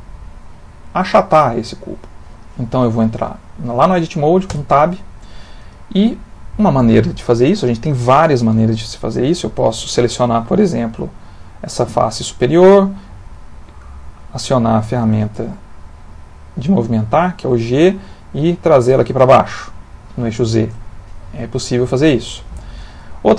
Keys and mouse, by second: 4.5 Tab, 9.6 click, 10.8 click, 12.7 click, 15.5 click, 21.7 ctrl+z, 22.3 ctrl+z.